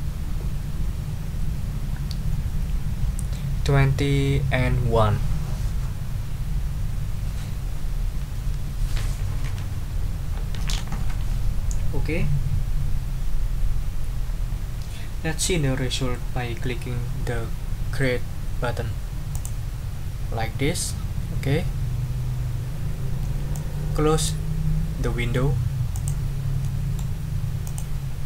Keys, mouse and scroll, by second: 19.3 click, 23.5 click, 25.9 click, 26.6 middle click, 27.6 click.